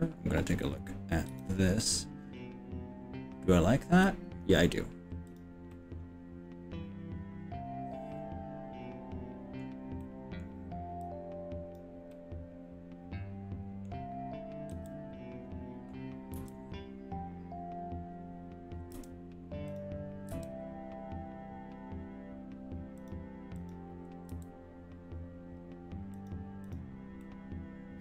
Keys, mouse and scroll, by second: 1.3 KP_3, 4.0 middle click, 5.1 scroll down 1, 5.4 click, 5.7-8.8 middle drag, 10.0 middle click, 11.0 click, 12.1-14.0 middle drag, 14.7 KP_3, 16.4 b, 20.4 g, 23.0 click, 23.6 click, 24.4 g, 26.6 click, 27.2-28.0 middle drag.